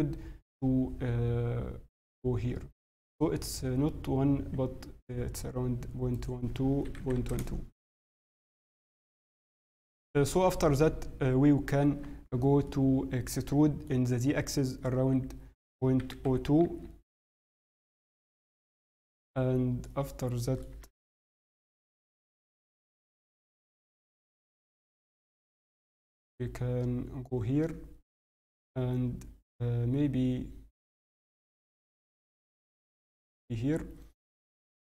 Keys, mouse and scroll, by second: 6.1 click, 8.4 n, 11.8 Tab, 12.6 middle click, 14.9 e, 19.0 shift+middle click, 19.8 middle click, 23.5 g, 33.2-33.6 scroll, 33.6 scroll down 3.